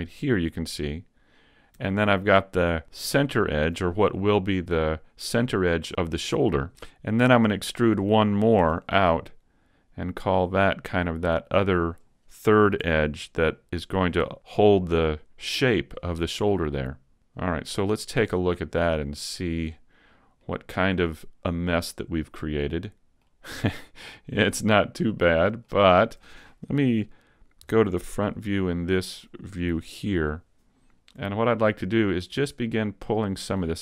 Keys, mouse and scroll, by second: 3.3 alt+right click, 8.7 e, 11.9 click, 12.8 r, 15.9 click, 18.7 click, 20.5 middle click, 24.2 right click, 24.5 middle click, 27.8 KP_1, 28.3 z, 28.8-30.1 scroll up 1, 30.1 KP_5, 30.8-31.3 scroll up 1, 31.4 shift+middle click.